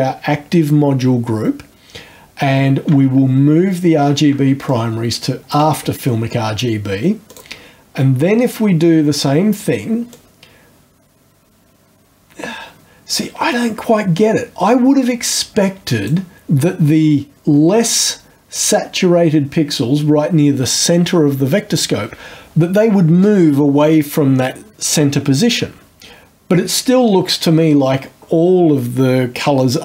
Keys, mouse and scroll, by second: 4.7-5.7 ctrl+shift+drag, 7.3 click, 10.1-16.3 drag.